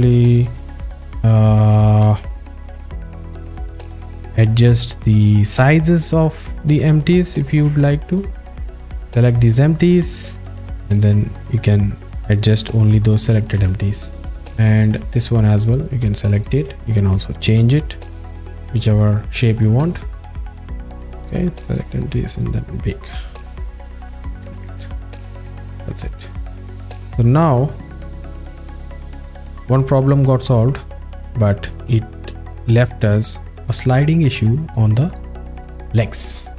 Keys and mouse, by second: 0.1 ctrl+alt+middle click, 1.1 z, 1.8 alt+shift+middle click, 10.9-13.4 drag, 13.6 z, 15.5 click, 16.6 z, 16.9-17.5 drag, 18.5 z, 20.0 alt+middle click, 21.6 click, 26.7-34.8 drag.